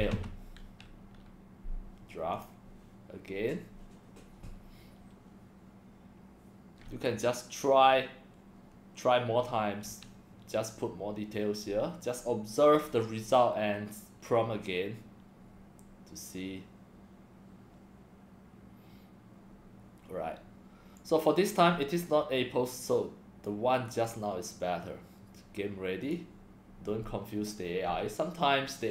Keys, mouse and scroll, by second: 0.1 l, 2.3 click, 21.0-21.6 drag, 22.9 click, 23.9 BackSpace, 26.0 click.